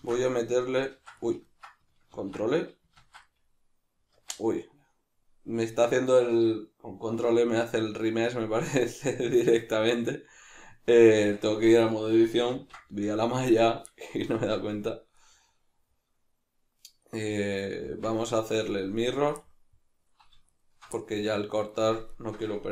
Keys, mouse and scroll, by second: 0.0 ctrl+r, 1.0 ctrl+z, 2.2 ctrl+r, 2.9 ctrl+z, 3.2 middle click, 4.1 Tab, 11.1 Tab, 12.6 ctrl+r, 13.7 right click, 14.4 Tab, 14.9 shift+middle click, 17.9 Tab, 18.3-19.0 middle drag, 19.0 alt+right click, 19.4-20.5 middle drag, 20.5 alt+shift+right click, 21.0-22.1 middle drag, 22.1 alt+shift+right click.